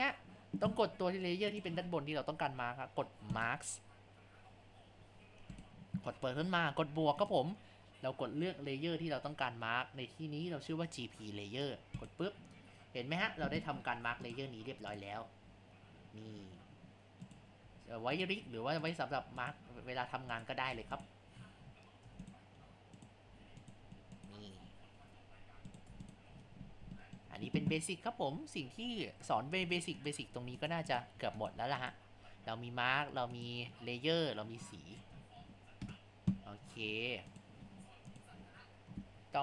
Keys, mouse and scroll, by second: 1.6 click, 3.3 click, 5.5-10.3 drag, 14.0 Tab, 15.0 click, 15.5 g, 17.6 g, 18.5 g, 19.1 g, 19.7 g, 20.7 Tab, 21.4 scroll down 4, 21.7 scroll up 5, 22.1 Tab, 23.3 g, 24.6 g, 25.9 Tab, 26.4-26.7 scroll down 5, 26.7-27.0 scroll up 2, 27.0-29.6 shift+middle drag, 29.6 click, 30.0 click, 30.9 click, 31.8 click, 33.3 click, 34.6 middle click, 36.1 KP_0, 36.6-37.2 scroll down 4, 37.3 click, 38.1 click, 38.5-39.4 scroll up 3.